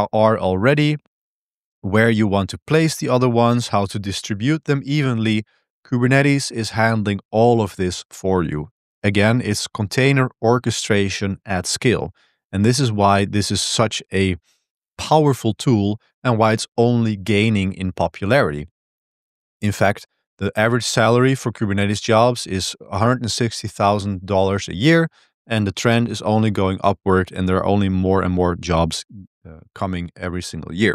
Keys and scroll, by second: 13.4 Tab, 13.4 Return, 13.4 super+1, 13.4 super+3, 29.3 ctrl+b, 29.6 1.